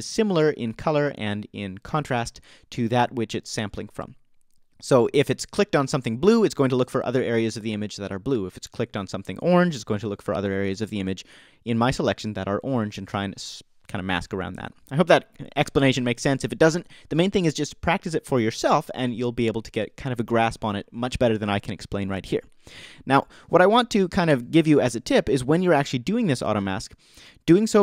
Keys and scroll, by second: 24.3 BackSpace.